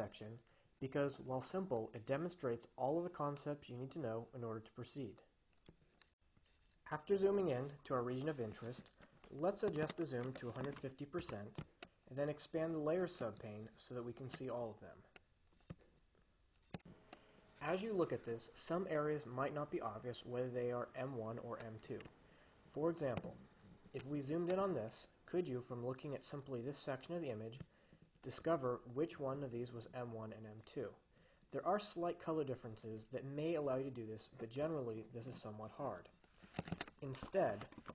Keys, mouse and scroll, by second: 10.8 click, 11.0-12.2 typing, 14.3-15.7 drag, 16.8 click, 23.7-25.0 drag, 37.2 click, 37.8 1.